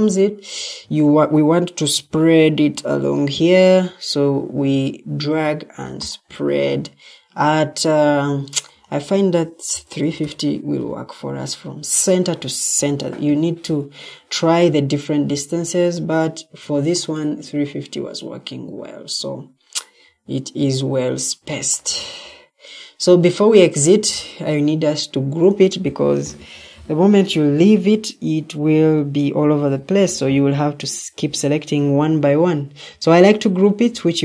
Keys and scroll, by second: 9.4-10.6 typing.